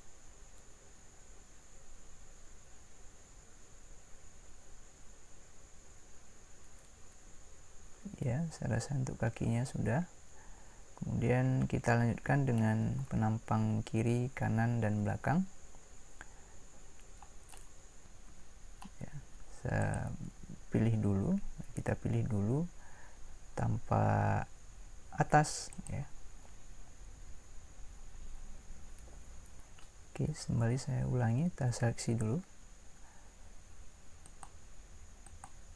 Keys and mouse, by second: 17.7 middle click, 18.3 a, 25.8 a, 27.0-32.7 middle drag.